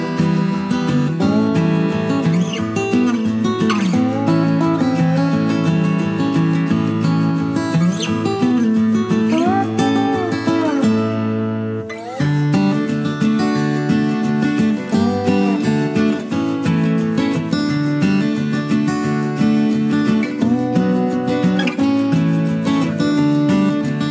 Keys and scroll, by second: 22.1-22.5 typing.